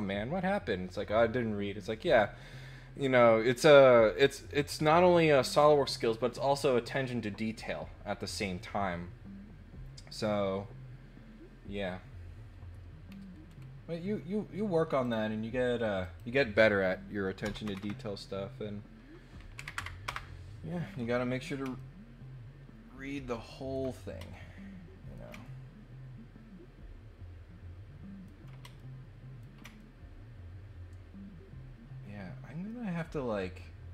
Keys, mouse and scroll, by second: 13.1 scroll down 2, 13.4 scroll up 4, 15.0 click, 16.0 click, 21.7-23.7 ctrl+middle drag, 24.3 shift+middle click, 25.4-28.2 ctrl+middle drag, 28.7 shift+middle click, 29.8-33.9 ctrl+middle drag.